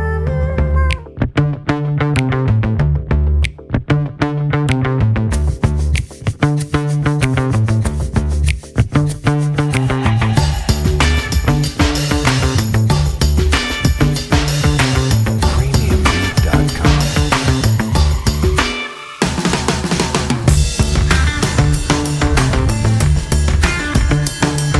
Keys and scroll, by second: 2.3 F4, 2.7 F3, 14.5 alt+F4, 15.0 F4, 17.6 F4, 19.3 F4.